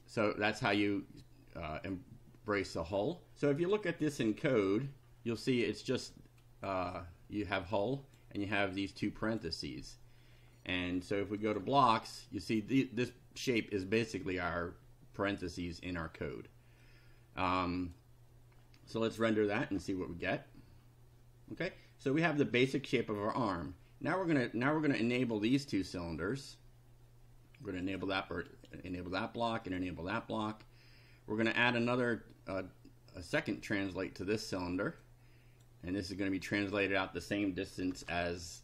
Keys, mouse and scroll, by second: 0.0-1.0 drag, 4.6 click, 6.2 click, 7.7 click, 9.1 click, 11.4 click, 16.8-18.1 drag, 19.2 click, 25.2 right click, 27.8 click, 28.5 right click, 29.6 click, 31.7 click, 33.4-34.8 drag, 35.1 click, 36.6 click, 37.5-38.4 typing.